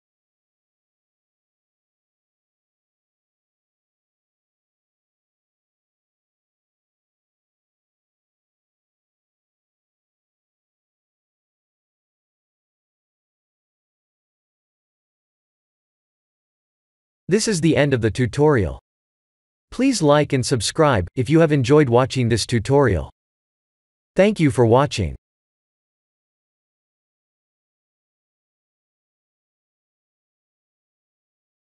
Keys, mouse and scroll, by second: 8.5 click.